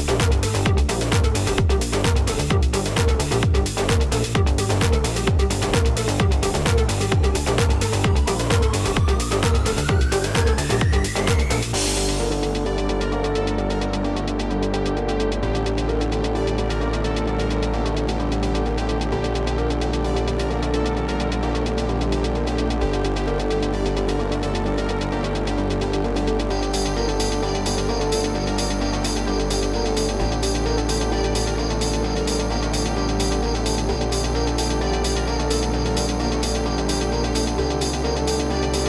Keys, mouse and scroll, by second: 2.2-17.1 drag, 17.3-38.8 drag.